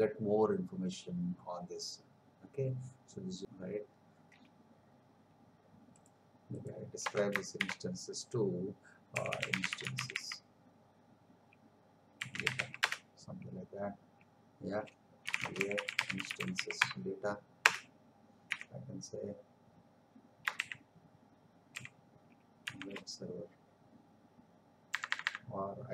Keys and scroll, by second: 7.0 space, 7.5 shift+., 20.5 shift+w, 21.7 shift+e, 22.6 shift+b, 24.9 BackSpace.